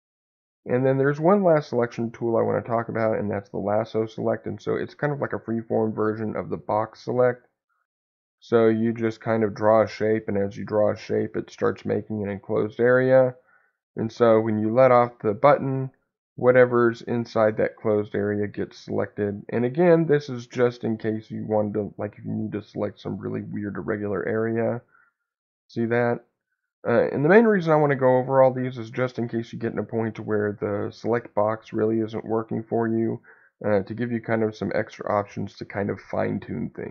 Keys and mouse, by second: 0.5-2.9 drag, 5.0 click, 6.1-14.6 drag, 18.8-24.5 drag.